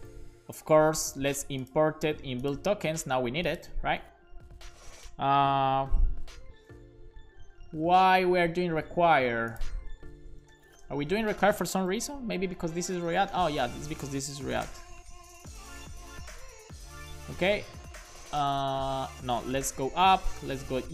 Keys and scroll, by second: 0.1 super+c, 6.0 super+b, 10.2 Return, 10.3-16.0 typing, 12.0 super+v, 17.3 /, 19.0 BackSpace, 19.7 ., 20.5 /.